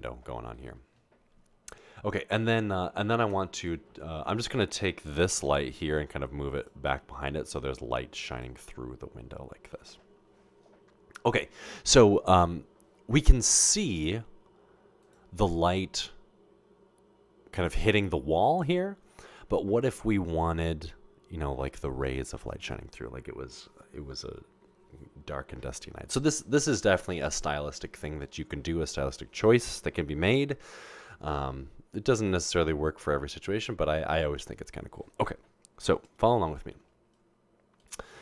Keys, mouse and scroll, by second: 3.7 Tab, 5.3 g, 7.9 g, 11.0 o.